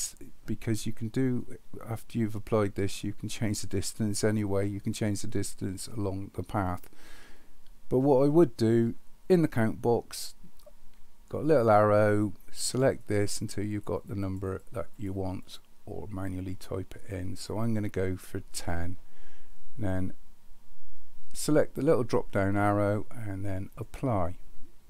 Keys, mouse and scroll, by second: 12.9 click, 13.5 click, 13.7 click, 13.9 click, 14.2 click, 14.4 click, 14.9 click, 22.2-23.9 drag.